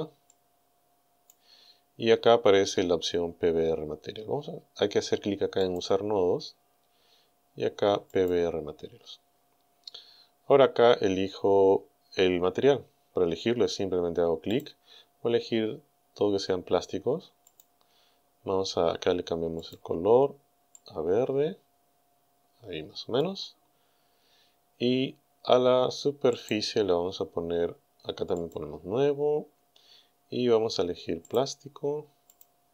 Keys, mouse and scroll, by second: 0.3 click, 5.6 click, 6.5-7.1 scroll down 1, 8.1 click, 9.1-9.4 scroll down 1, 14.6 click, 17.5 click, 19.6 click, 20.8-23.4 drag, 26.4 right click, 28.4 click, 31.3 click, 32.3 click.